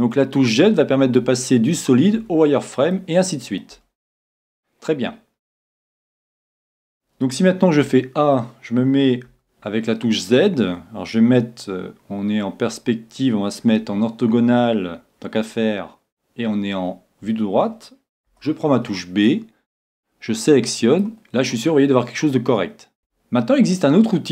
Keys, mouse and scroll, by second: 0.0-1.4 drag, 0.2-1.2 middle drag, 1.1 z, 1.4 middle click, 1.7 middle click, 2.9-6.0 middle drag, 3.7 z, 7.8 a, 9.3 z, 9.9-11.9 middle drag, 12.7 n, 13.9 n, 18.3 b, 23.0 a, 23.7-24.3 middle drag.